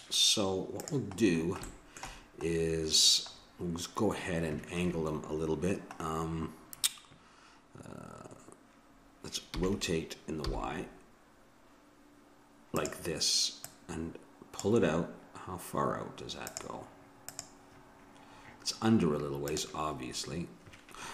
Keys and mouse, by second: 0.8-2.5 drag, 9.8 r, 13.6-15.4 drag.